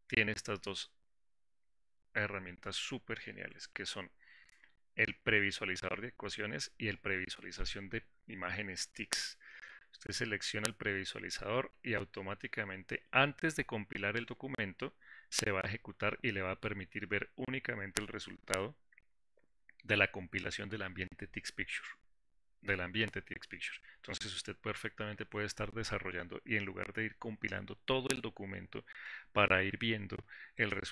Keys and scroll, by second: 10.9 ctrl+shift+y.